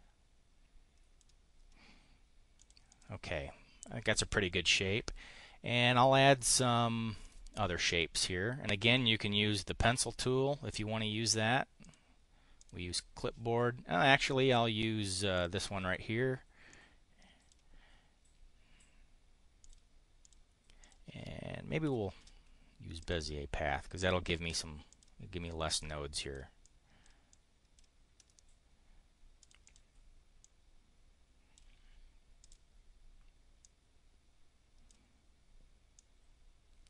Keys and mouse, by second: 2.6 click, 2.9 click, 7.3 click, 9.8 click, 11.9 click, 12.6 click, 14.1 click, 15.4 click, 16.7 click, 19.7 click, 20.2 click, 20.8 click, 21.8 Delete, 24.9 click, 25.8 click, 26.6 click, 27.2 click, 28.1 click, 29.4 click, 30.4-31.6 drag, 32.4 click, 33.6-35.0 drag, 36.0-36.8 drag.